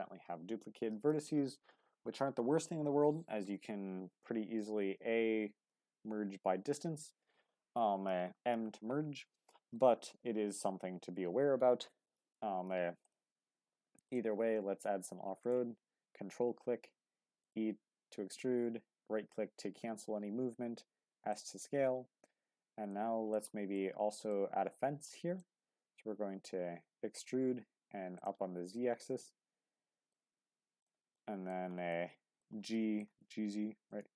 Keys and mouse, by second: 4.6 a, 5.5 m, 10.2 middle click, 13.0-14.1 drag, 17.1 e, 17.9 s, 21.3-22.9 drag, 22.9 middle click, 23.7 middle click, 25.1 middle click, 25.6 e, 26.0 z, 28.1 click, 28.8-30.1 middle drag, 30.8 click, 31.1 middle click, 31.9 middle click, 32.7 middle click, 33.1 g, 33.3 z, 33.9 click.